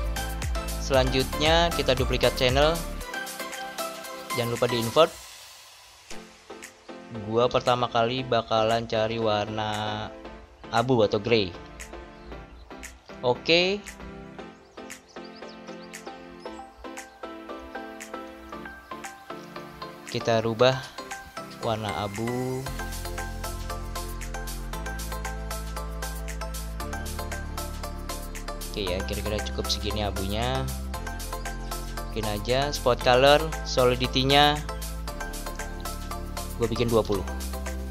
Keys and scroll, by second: 7.3 BackSpace, 36.7 typing.